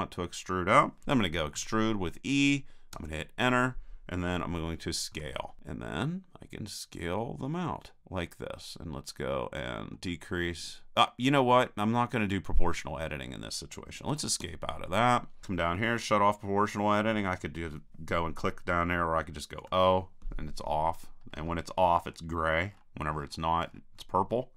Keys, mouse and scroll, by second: 1.5 e, 5.1 s, 19.6 o.